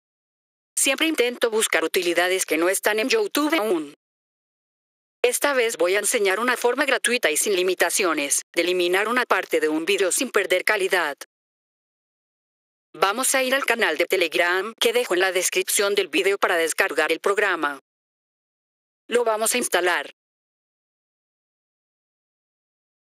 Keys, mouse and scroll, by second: 7.6 right click, 9.8 click, 11.3 right click, 21.6 click.